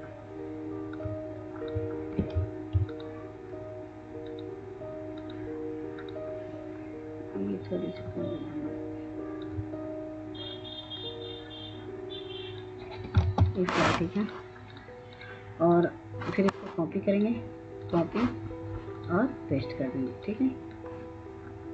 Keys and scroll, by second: 13.4 ctrl+space.